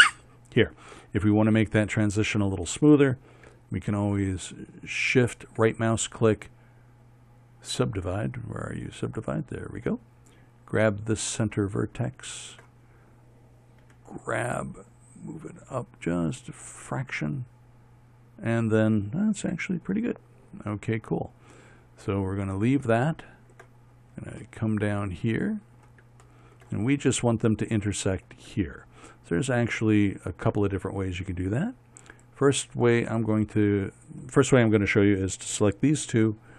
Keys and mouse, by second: 14.5 g, 20.1 a, 24.1 middle click, 32.8-35.8 right drag.